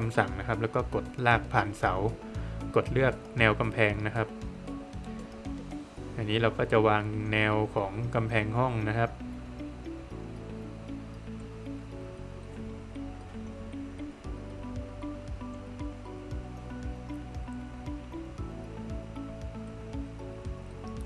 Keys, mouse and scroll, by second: 1.5 click, 3.1 click, 4.0 middle click, 4.4 scroll down 1, 4.6 middle click, 5.7 scroll down 1, 5.8 middle click, 7.1-7.6 scroll up 1, 7.6 scroll down 1, 7.8 middle click, 8.4 scroll up 1, 10.4 scroll, 10.5 click, 10.8 scroll down 1, 11.0 middle click, 11.9-12.2 scroll up 1, 13.0 click, 13.4 scroll down 1, 13.6 middle click, 15.3 click, 16.4 middle click, 17.7 middle click, 18.6-19.6 scroll up 1, 19.6 scroll down 1, 19.8 middle click, 20.4-21.0 scroll up 1.